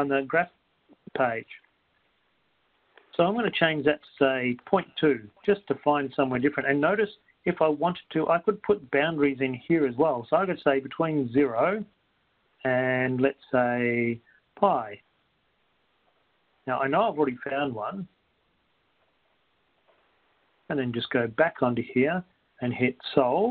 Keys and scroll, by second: 4.9-5.9 typing, 8.4 Down, 9.9 Right, 11.4 0, 12.9 ,, 19.2-19.9 typing, 21.4 Up.